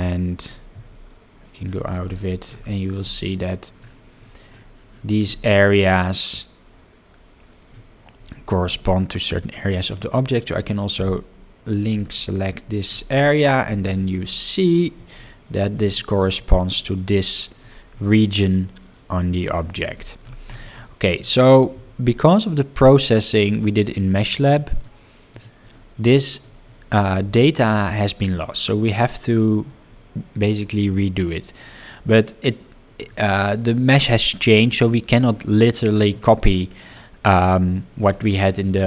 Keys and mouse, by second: 1.3 Tab, 3.4-3.8 middle drag, 7.3 Tab, 12.4 l, 15.0 middle click, 15.9 shift+middle click, 16.4 middle click, 17.6 middle click, 19.3 shift+middle click, 22.3 Tab, 24.0 drag, 24.4 click, 24.7 click, 25.3 click, 26.1-26.4 shift+middle drag, 26.6-27.1 middle drag, 27.3 shift+middle drag, 28.3 drag.